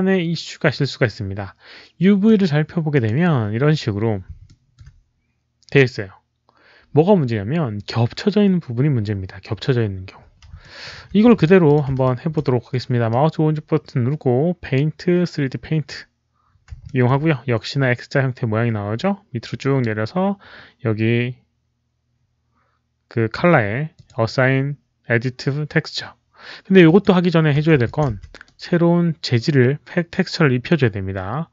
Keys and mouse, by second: 2.2 shift+click, 2.8 click, 4.4 alt+middle click, 7.5 alt+middle click, 10.6 alt+middle click, 11.1 w, 11.3 click, 11.6 click, 12.0 alt+click, 13.0-15.8 right drag, 15.8 alt+click, 15.8 alt+middle click, 15.8 w, 16.8-21.4 alt+middle drag, 22.0 w, 22.1 alt+middle click, 22.1 right click, 22.1 alt+click, 23.8 click, 23.8 alt+middle click, 26.8 click, 27.8 alt+click, 28.1 w, 28.3-31.5 right drag.